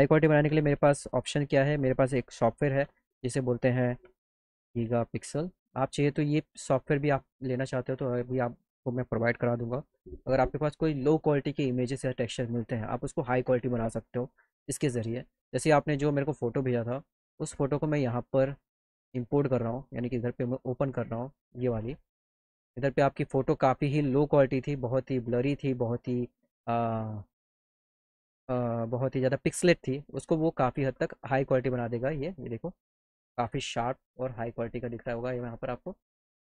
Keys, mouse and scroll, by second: 6.4 click, 16.1 click, 19.7 click, 20.1 click, 21.4 click, 22.2 click, 34.1 middle click, 34.5 middle click, 34.7 middle click, 35.0 middle click.